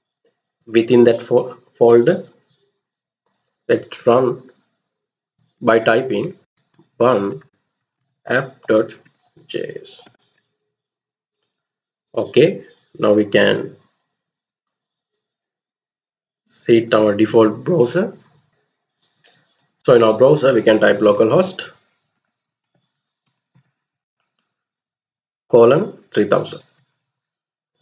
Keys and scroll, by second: 5.8-9.5 typing, 9.8 Return, 20.6 typing, 21.8-24.7 typing, 26.2-27.4 typing, 27.4 Return.